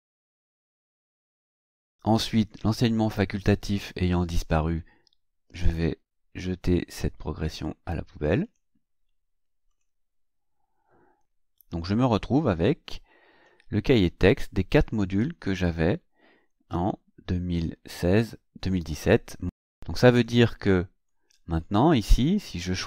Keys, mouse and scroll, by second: 0.9 click, 2.6 click, 8.4 click, 9.7 click, 21.1 click, 22.7 click.